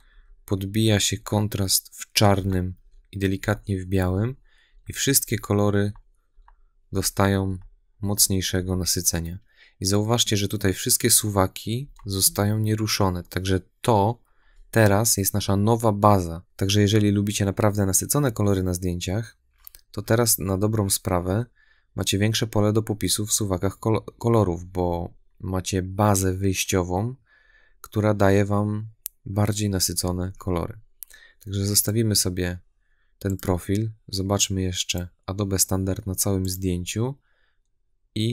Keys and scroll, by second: 11.7 \.